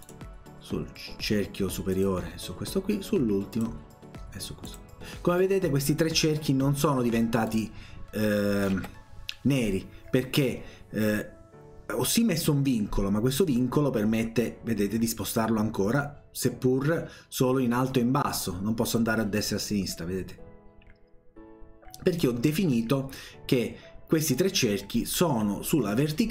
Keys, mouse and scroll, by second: 0.0 click, 2.0 click, 3.6 click, 4.7 click, 7.5 click, 8.8 Escape, 13.5-22.2 drag.